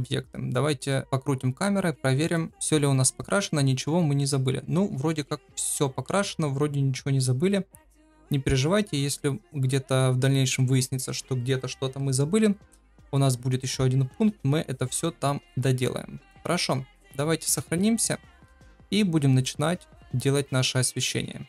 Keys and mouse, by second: 0.4-0.8 middle drag, 1.0-2.3 middle drag, 3.0-10.5 middle drag, 13.1-16.3 middle drag, 17.3 ctrl+s, 17.5 KP_0.